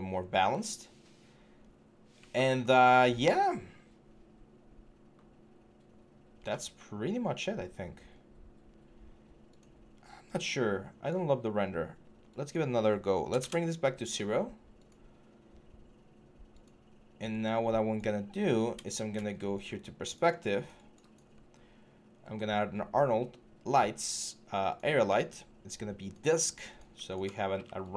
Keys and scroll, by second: 13.2 Return.